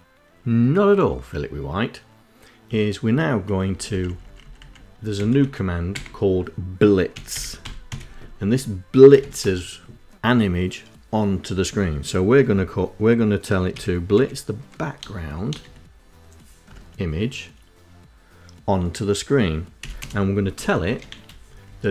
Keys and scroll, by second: 3.2 Right, 3.4 Right, 3.6 Right, 3.8 Right, 4.1 Right, 4.3 Right, 4.8 shift+End, 5.6 Delete, 6.7 b, 7.2 i, 7.5 z, 8.9 shift+9, 13.6-15.3 typing, 19.4-21.1 typing, 21.3 Left.